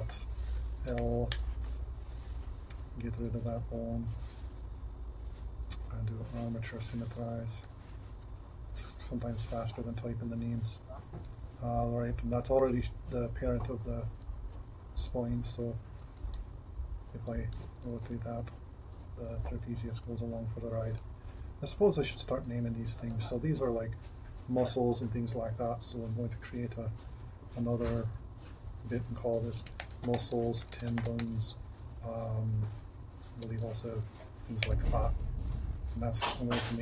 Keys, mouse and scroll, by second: 7.7-10.0 drag, 15.3 Tab, 16.3 r, 18.2 r, 28.0-36.8 drag.